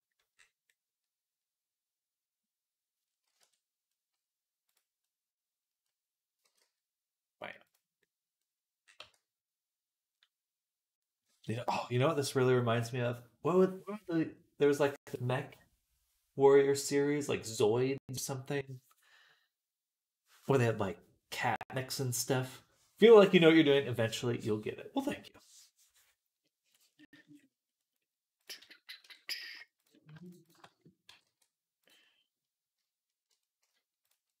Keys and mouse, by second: 1.3 click, 1.3 middle click, 1.3 right click, 1.5-3.7 drag, 1.5-3.7 middle drag, 1.5-3.7 right drag, 3.2 Tab, 4.6-7.8 right drag, 6.3 g, 7.8-8.8 drag, 8.8 Tab, 9.0 click, 9.5 right click, 10.7-29.2 right drag, 28.9 Tab, 29.2-30.5 shift+drag, 30.5 right click, 30.6-31.8 drag, 30.9 g, 31.8 right click, 32.3-34.4 drag.